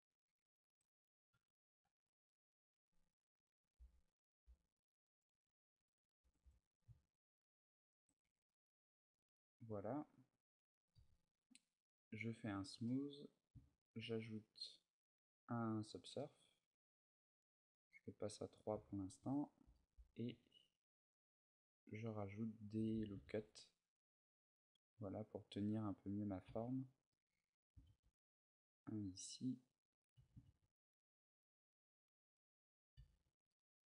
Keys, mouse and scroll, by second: 0.4 shift+click, 1.1 Tab, 3.1 a, 3.6 b, 5.2 b, 5.7 right click, 5.9 g, 7.8 click, 8.0 z, 8.3 middle click, 8.9 a, 9.1-9.7 scroll down 3, 9.5 Tab, 10.7 t, 11.8 click, 12.2 t, 12.6 middle click, 14.1 click, 16.0 middle click, 17.0 click, 17.2 click, 17.7 middle click, 18.5 Tab, 19.2 a, 19.7 a, 20.1 ctrl+r, 22.7 click, 22.7 a, 23.0 ctrl+r, 26.1 click, 26.2 a, 26.9 middle click, 27.6 ctrl+r, 29.9 click, 29.9 a, 30.2 ctrl+r, 32.7 click, 33.0 Tab, 33.0 a, 33.2 middle click.